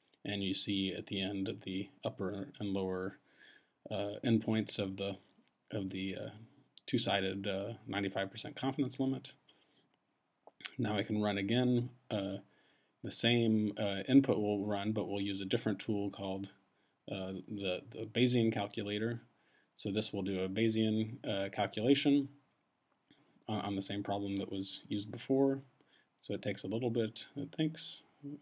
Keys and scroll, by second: 10.9 Up, 14.1 shift+b, 14.6 Tab, 18.4 shift+c, 20.3 Tab, 24.4 Return.